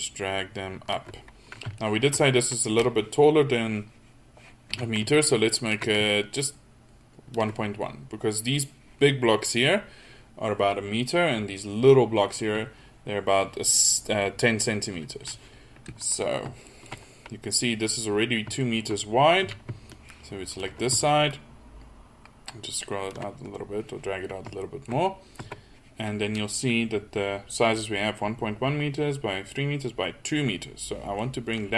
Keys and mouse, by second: 4.8 a, 19.4 a, 25.4 Tab.